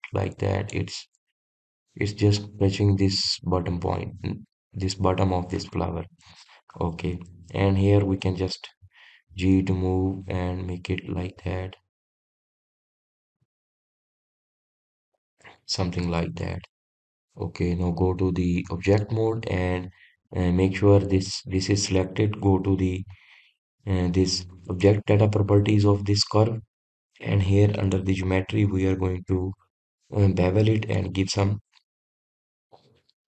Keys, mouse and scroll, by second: 2.1-3.4 scroll up 1, 3.4-4.3 scroll up 1, 4.3-6.5 scroll up 1, 7.1-7.6 scroll down 10, 8.5-9.2 scroll up 1, 9.2 click, 10.4 g, 13.3 click, 14.4 g, 16.0 click, 17.4 Tab, 19.0-21.4 drag, 22.3 click, 25.8 click, 28.9-29.4 drag, 29.4-30.9 scroll down 1, 30.9-32.0 scroll down 1, 32.0-33.3 drag.